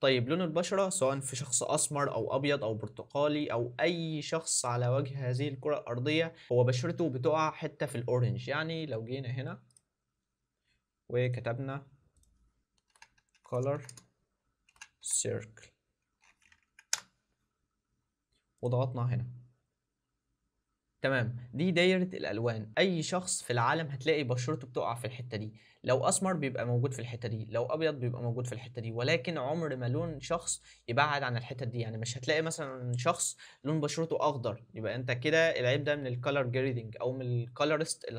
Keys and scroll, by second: 12.9 shift+c, 14.4 shift+c, 14.6 shift+c.